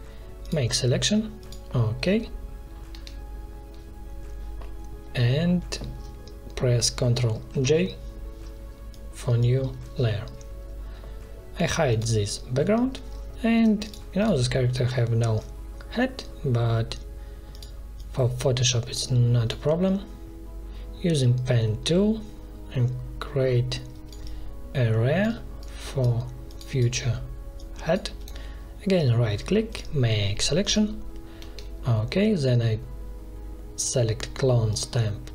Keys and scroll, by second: 2.8 v, 7.4 ctrl+j, 9.7 ctrl+z, 14.7 p, 31.3 v.